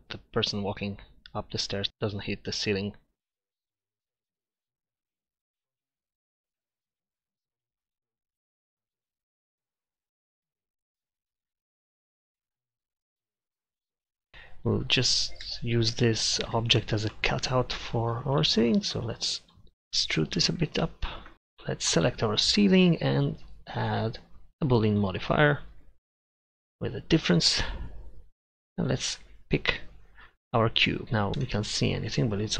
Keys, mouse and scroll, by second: 7.0 middle click, 8.1 middle click, 8.4 middle click, 8.8 Tab, 10.6 ctrl+shift+z, 13.8 middle click, 14.3-15.7 middle drag, 16.8-18.1 middle drag, 19.0-20.1 middle drag, 28.1 middle click, 31.5 z.